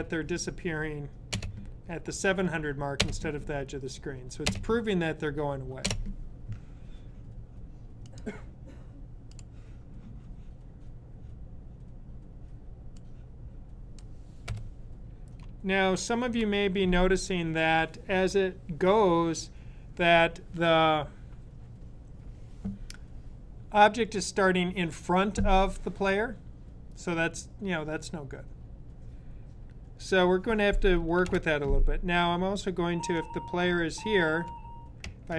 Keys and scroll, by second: 16.2 super+s, 32.3-33.0 Left, 33.6 Left, 34.1 Left, 34.2 Left, 34.3 Left.